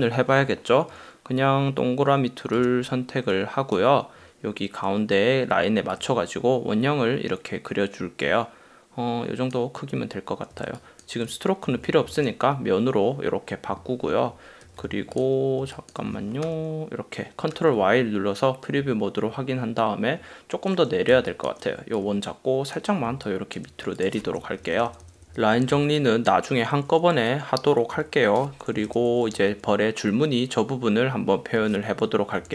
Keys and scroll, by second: 10.7 space, 12.3 shift+x, 14.7 v, 15.9 space, 16.5 super+y, 17.6 super+y, 21.3 super+space, 23.4 space, 24.9 super+-, 26.1 space, 29.1 super+;.